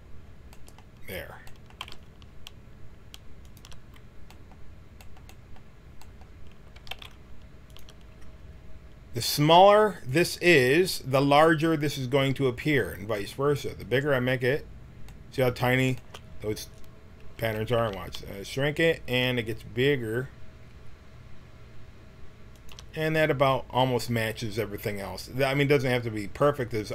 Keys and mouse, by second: 1.8 g, 6.7 g, 9.9 right click, 14.3-15.4 middle drag, 17.3 s.